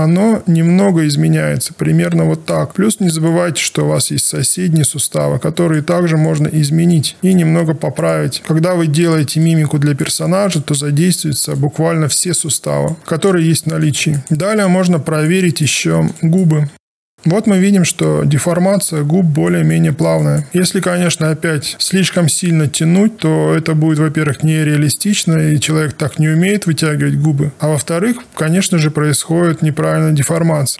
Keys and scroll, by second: 16.7 w.